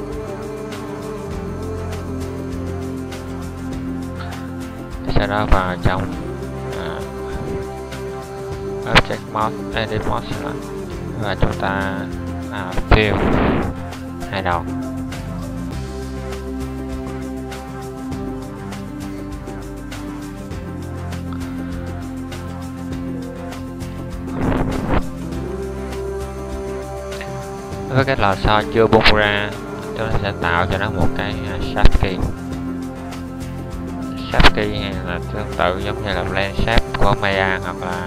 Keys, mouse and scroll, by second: 1.6 Tab, 6.5 Tab, 13.1 f, 14.3 alt+middle click, 17.3 alt+middle click, 19.8 f, 22.9 Tab, 36.2-38.0 middle drag.